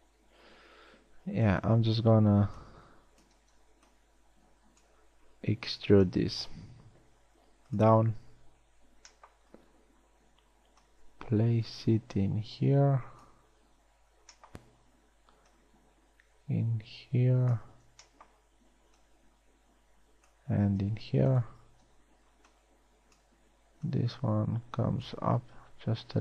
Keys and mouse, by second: 0.4 KP_1, 2.1 z, 2.5 a, 2.9 a, 3.0 b, 4.1 b, 6.9 e, 9.5 b, 14.7 b, 18.3 b, 21.5 b, 22.1 a, 22.5 b.